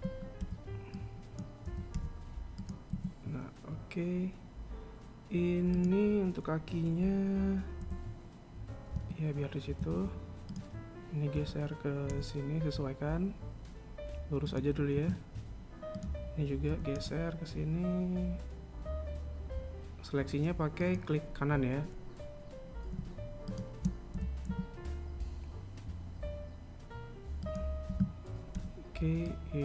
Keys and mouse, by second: 0.6 a, 1.1 b, 3.6 a, 6.4 right click, 8.5 g, 10.5 a, 11.1 right click, 12.0 g, 15.6 a, 16.5 right click, 17.3 g, 24.1 shift+right click, 24.7 g, 28.5 a.